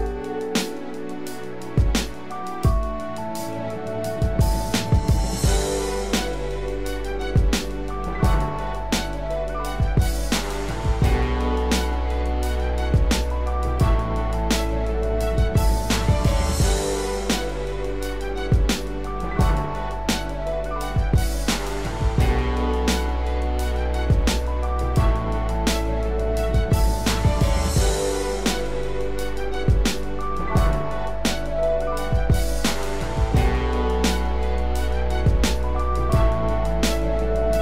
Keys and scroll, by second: 6.5 ctrl+-, 8.9 ctrl+=, 36.2 ctrl+0.